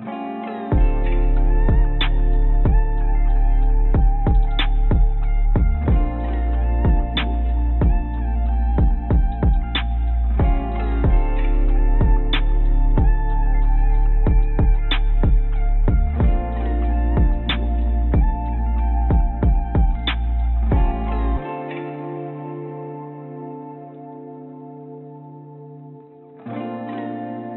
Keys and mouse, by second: 0.0 shift+click, 2.2 shift+click, 2.7 shift+click, 3.5-5.4 drag, 6.7 shift+click, 7.9 click, 7.9 right click, 9.4 shift+click, 12.1-13.8 drag, 14.7 shift+click, 15.4 shift+click, 16.3-18.1 middle drag, 18.8 middle click, 18.9 click, 20.1 shift+click, 20.7 shift+click, 21.0 shift+click, 21.4 shift+click, 22.5 shift+click, 23.1 shift+click.